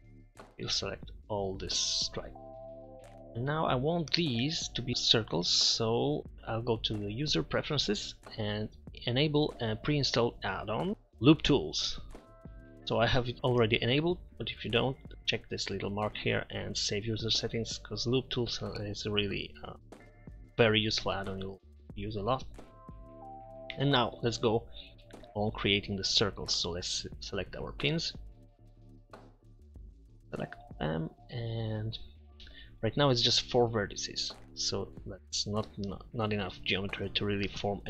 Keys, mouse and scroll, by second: 4.3-4.9 drag, 5.0 click, 6.2 Tab, 9.8-10.9 middle drag, 21.2 middle click, 21.9-22.7 middle drag, 28.1 a.